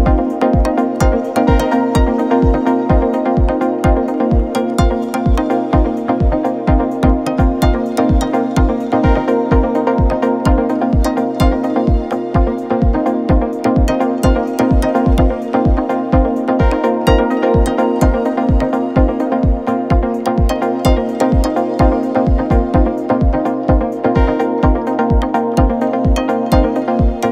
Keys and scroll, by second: 2.2 3, 3.6 ,, 18.3 Delete, 19.4 ].